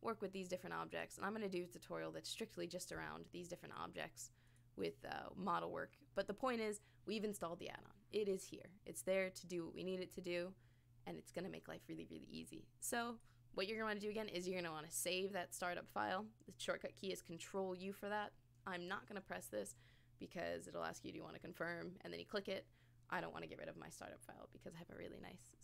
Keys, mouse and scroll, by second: 0.9 click, 2.2 click, 2.8 click, 3.6 click, 3.9 click, 4.5 click, 4.8 click, 5.3 scroll down 1, 5.9 scroll up 4, 13.1 click.